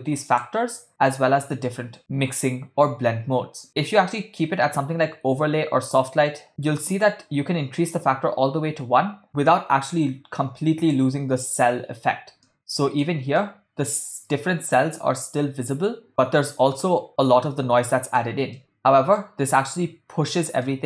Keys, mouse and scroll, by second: 0.3-6.5 drag, 9.2-11.2 drag, 12.5-13.2 middle drag, 13.5-14.0 shift+middle drag, 18.0-18.3 shift+middle drag, 18.7 ctrl+middle click, 18.9 middle click, 20.7-20.8 ctrl+middle drag.